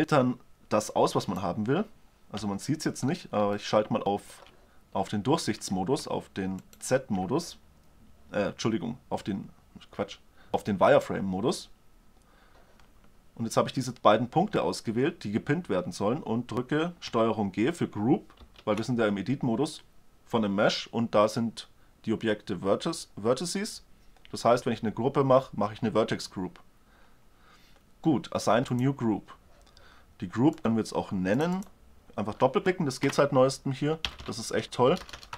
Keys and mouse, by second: 0.9-2.0 middle drag, 2.0 z, 2.7 middle click, 6.2-7.5 drag, 7.8-8.6 drag, 18.2 ctrl+g, 30.3-33.4 drag, 34.0 l, 34.9 BackSpace.